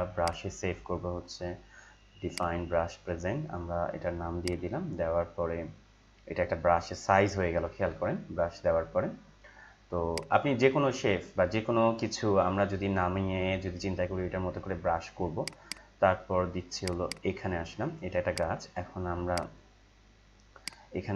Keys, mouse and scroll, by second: 0.2 click, 10.1 click, 15.4 click.